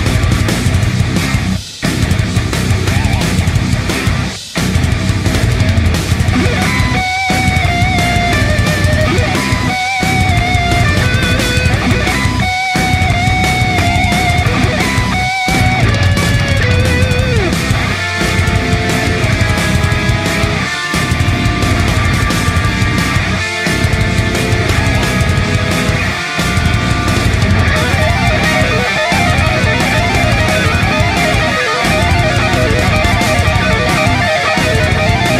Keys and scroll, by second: 9.2 shift+F5, 9.7 Return, 30.0 shift+F5, 30.4 Return.